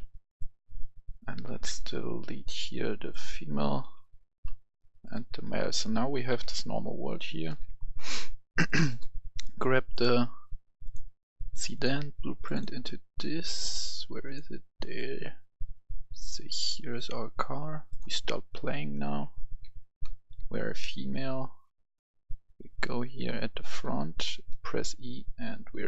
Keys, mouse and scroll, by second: 2.2-2.5 scroll down 1, 3.0 click, 3.9 Delete, 4.5 scroll down 1, 5.0 click, 5.3 Delete, 5.8-7.3 right drag, 6.4 s, 6.9 s, 7.0 s, 7.6 right click, 8.7-19.0 drag, 19.7 k, 20.4-21.2 w, 21.9 click, 21.9 k, 21.9 w.